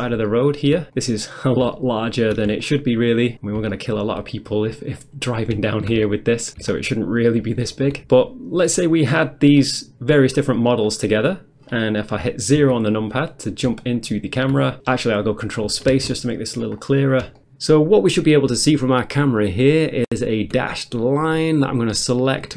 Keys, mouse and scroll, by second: 1.0 click, 1.3 middle click, 1.6 middle click, 1.8 shift+middle click, 4.0 ctrl+scroll down 1, 4.3 scroll down 1, 4.7-5.3 ctrl+scroll up 1, 5.6 scroll up 1, 5.7-6.2 shift+scroll down 3, 6.7 ctrl+middle click, 8.2 middle click, 8.7 middle click, 10.9-12.1 scroll down 1, 12.6 0, 13.8 shift+middle click, 15.9 ctrl+space, 16.8 scroll up 1, 18.8 ctrl+middle click, 21.5 click.